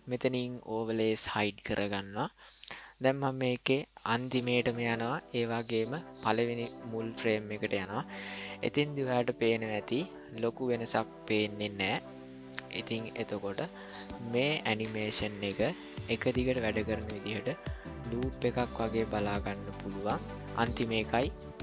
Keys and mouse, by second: 0.5 click, 1.9-3.9 drag, 5.5 click, 8.9 click, 12.9-18.7 drag, 19.8 click.